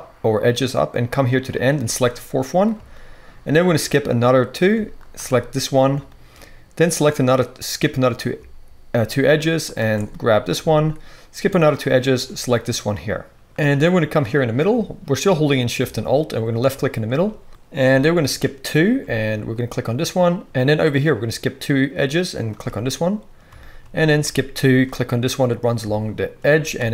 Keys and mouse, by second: 1.6-4.9 alt+shift+drag, 4.9 alt+shift+middle click, 5.0 alt+shift+click, 5.2-12.5 shift+right drag, 12.2 shift+click, 12.5 middle click, 12.9-19.5 right drag, 13.4 ctrl+z, 16.5 alt+shift+click, 16.5 alt+shift+middle click, 19.5 alt+shift+middle click, 19.6-22.3 alt+shift+right drag, 22.3 alt+shift+middle click, 22.4-24.5 alt+shift+right drag, 24.5 alt+shift+middle click, 24.6 alt+shift+right click, 24.8-26.3 shift+drag, 26.3-26.9 shift+right drag.